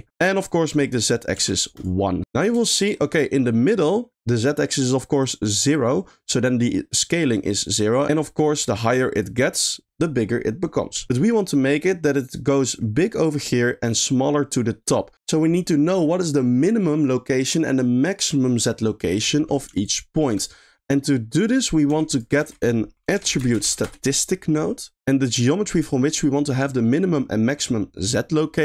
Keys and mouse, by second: 1.1 click, 2.3 middle click, 2.6 shift+middle click, 3.0 middle click, 3.7 click, 5.2 click, 8.7 click, 9.4 click, 12.6-14.9 drag, 19.8 ctrl+click, 21.4 drag, 21.8 g, 22.4 shift+a, 23.3 t.